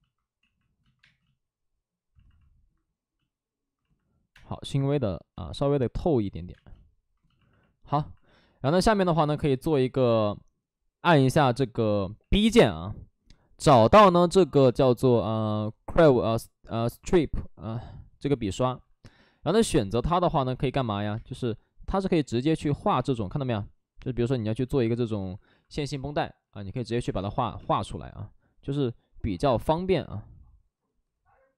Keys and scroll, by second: 0.9 space, 4.2 space, 4.4 1, 5.2 ctrl+z, 6.4 space, 9.5 space, 12.1 b, 18.6 alt+s, 20.2 space, 22.6 space, 22.8 ctrl+z, 22.8 space, 24.8 alt+s, 26.6 alt+s, 26.8 ctrl+z, 27.0 space, 29.2 ctrl+z, 29.4 space.